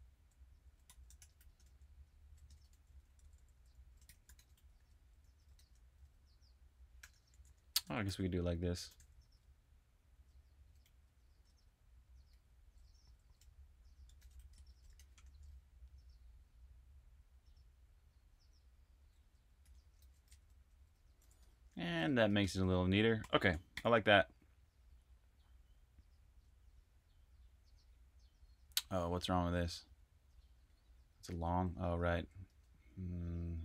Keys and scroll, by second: 2.6 typing, 5.1-12.2 typing, 13.3 typing, 14.7-15.6 typing, 18.6-24.8 typing, 31.3 super+Tab, 32.3 super+Tab, 33.2-33.6 typing.